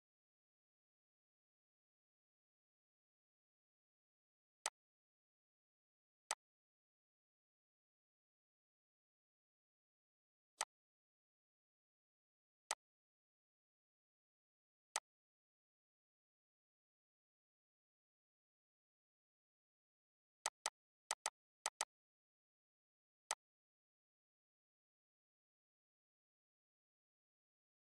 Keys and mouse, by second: 1.8 ctrl+z, 4.3 click, 10.2 click, 14.6 click, 20.1 click.